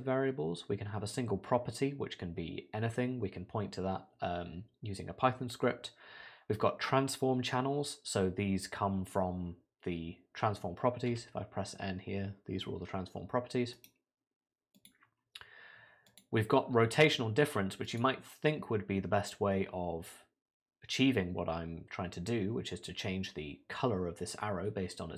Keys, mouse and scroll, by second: 11.1 n, 13.7 right click.